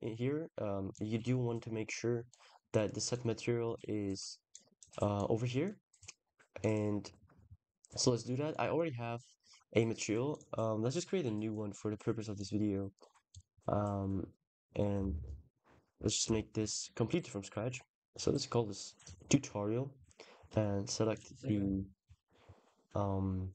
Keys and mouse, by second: 0.8 click, 2.9 drag, 4.3 drag, 5.0 click, 6.4 click, 7.1-10.2 drag, 11.4-12.4 drag, 13.2 click, 14.3-17.0 drag, 18.3 drag, 19.0 click, 20.0-21.4 drag, 21.5 ctrl+s.